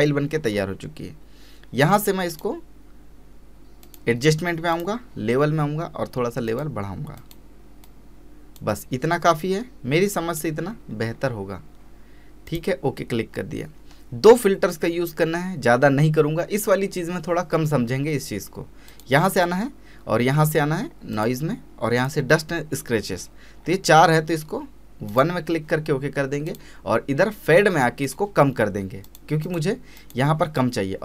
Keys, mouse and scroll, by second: 2.3 click, 8.1-10.7 drag, 10.7 scroll down 1, 11.1-12.5 scroll up 1, 12.5 click, 18.9 click, 21.1 click, 23.2-25.1 scroll down 1, 25.1 click.